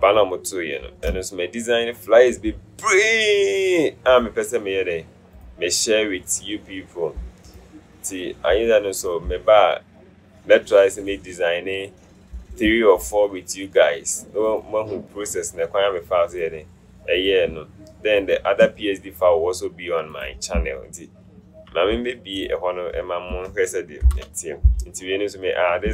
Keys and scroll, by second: 24.1 ctrl+alt+shift+0.